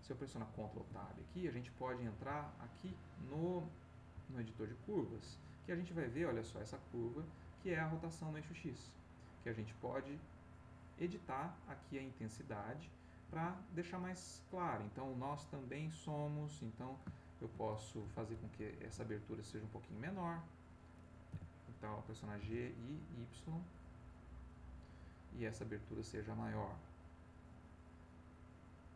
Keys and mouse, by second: 0.9 ctrl+Tab, 1.8 ctrl+middle click, 2.4 ctrl+middle click, 3.6 ctrl+middle click, 4.3 ctrl+middle click, 6.3 click, 7.2 click, 7.6 g, 9.4 Escape, 12.0 click, 12.3 g, 13.2 Escape, 17.3 shift+click, 18.0 g, 18.9 x, 21.3 g, 22.4 y, 24.3 click, 25.4 click, 26.2-28.9 drag.